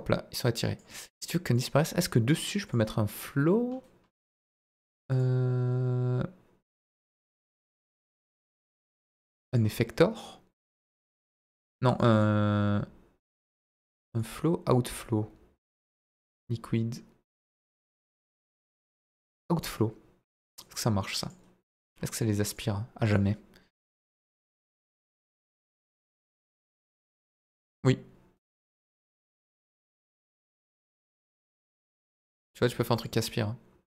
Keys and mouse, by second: 2.7 click, 5.2-9.5 drag, 10.5 click, 11.8 click, 12.1-13.4 drag, 14.2-16.1 drag, 18.7-19.6 drag, 22.4 click, 23.0-25.9 drag, 26.8-32.3 drag.